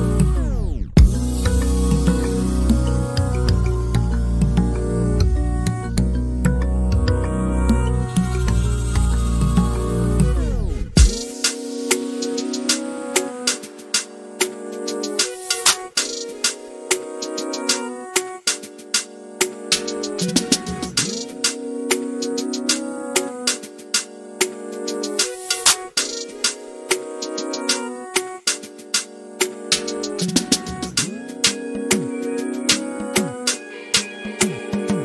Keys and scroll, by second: 0.2-0.9 typing, 32.8 ctrl+a.